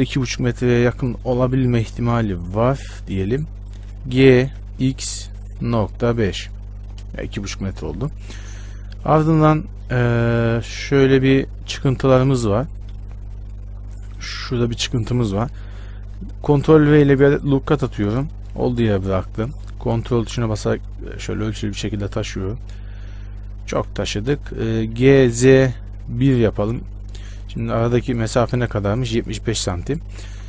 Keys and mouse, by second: 4.4 g, 16.1 ctrl+r, 21.0-24.4 drag, 24.4 ctrl+z, 25.2 g, 28.2-30.2 drag, 30.2 a.